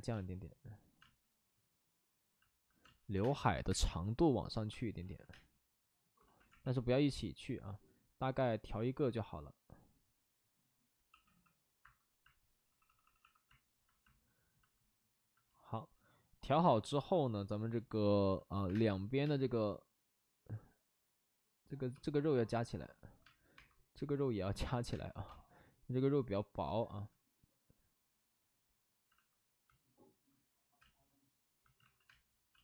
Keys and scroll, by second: 0.1 space, 0.9 space, 2.8 space, 3.1 3, 3.6 space, 4.7 space, 5.0 ctrl+z, 5.3 space, 6.1 ctrl+z, 6.4 x, 11.1 d, 11.2 d, 11.8 Escape, 12.8 d, 18.6 1, 18.6 space, 20.0 space, 21.9 space, 23.2-25.8 typing, 24.6 ctrl+z, 26.8 ctrl+z, 29.1 alt+s, 30.8 space, 31.7 alt+s, 32.0 space, 32.5 space.